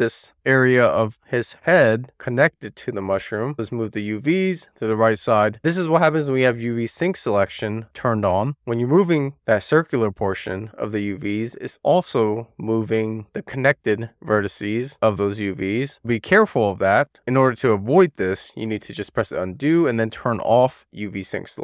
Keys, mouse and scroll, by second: 0.2 click, 1.1-1.8 drag, 3.4 e, 3.5 click, 10.7 click, 16.7 z, 18.4 super+z, 19.3 scroll down 1, 19.5 middle click, 19.7 click, 20.5-21.3 scroll up 1, 21.3 click.